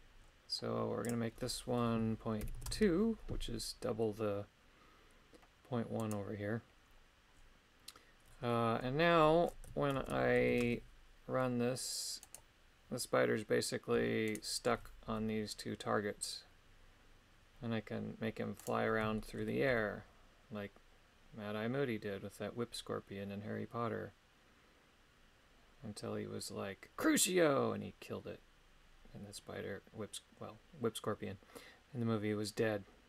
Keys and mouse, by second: 1.2-2.7 drag, 6.0 right click, 9.9 ctrl+Tab, 10.6 shift+space, 12.3 right click, 15.1 g, 19.2 shift+middle click, 19.7 g.